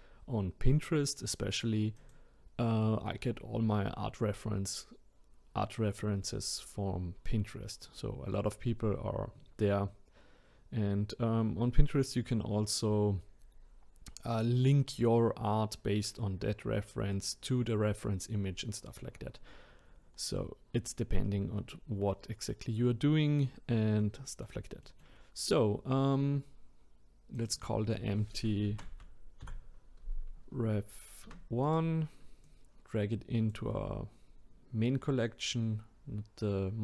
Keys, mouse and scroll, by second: 2.0 click, 19.9-21.3 scroll up 1, 21.3-24.0 scroll down 1, 24.0-27.3 middle drag, 27.3 click, 27.5-30.7 drag, 32.4 click.